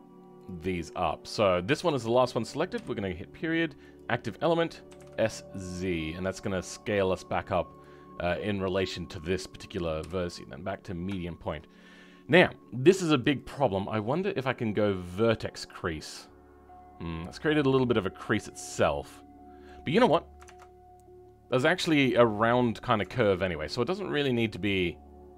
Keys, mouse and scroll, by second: 1.0 shift+click, 10.7 ., 11.2-13.3 shift+middle drag, 13.3 click, 15.6 middle click, 18.1 middle click.